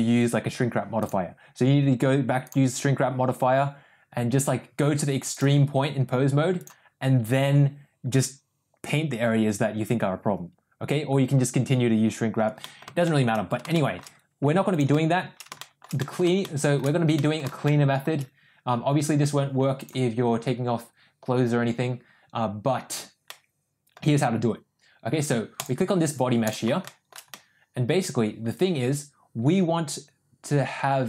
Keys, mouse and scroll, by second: 1.1-2.7 drag, 6.6 click, 12.7 middle click, 13.1 shift+middle click, 13.8 shift+middle click, 15.6 shift+middle drag, 16.0 middle drag, 16.5-16.8 shift+middle drag, 17.2 middle click, 17.7-18.0 shift+middle drag, 19.9-22.1 drag, 23.3 middle click, 25.6 click, 26.4 click, 26.9 shift+middle drag, 27.3-30.8 middle drag.